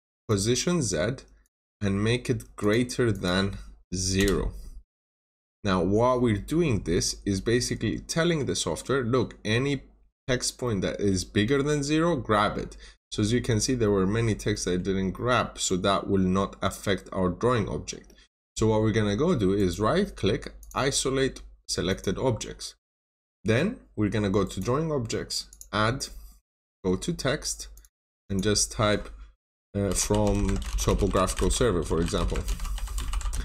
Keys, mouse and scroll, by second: 0.2 click, 4.1 typing, 5.2 click, 5.9 scroll down 1, 7.3 scroll up 1, 7.8 scroll down 1, 8.0 middle click, 8.3 scroll down 1, 8.7 middle click, 9.5 scroll up 1, 10.5 middle click, 12.9 scroll up 1, 13.4 scroll down 1, 13.7 middle click, 15.4 scroll down 1, 15.6 middle click, 16.2-16.9 scroll down 1, 18.0 middle click, 19.5 right click, 20.5 click, 22.7 middle click, 24.3 right click, 25.4 click, 28.7 click, 29.5-33.3 typing.